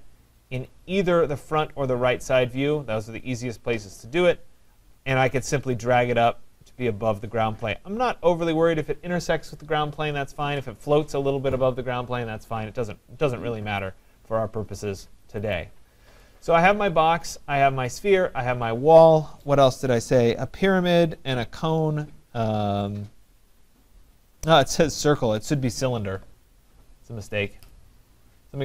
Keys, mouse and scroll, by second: 0.4 middle click, 0.5 middle click, 0.7 middle click, 1.5 middle click, 1.6-2.2 scroll, 2.2-2.8 scroll, 2.9 middle click, 3.0-7.4 middle click, 13.8 click, 15.3 click, 15.6 click, 17.3 right click, 27.7 right click.